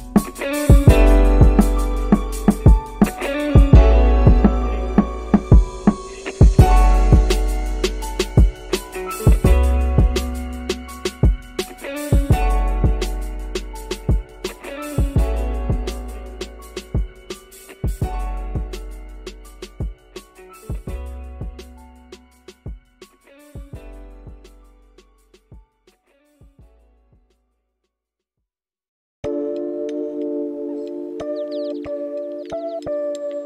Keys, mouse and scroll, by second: 0.2-1.4 middle drag, 3.0 r, 9.4 ctrl+a, 15.0 click, 17.7 shift+click, 19.9 ctrl+p, 24.4 click, 26.1 click, 28.0 g.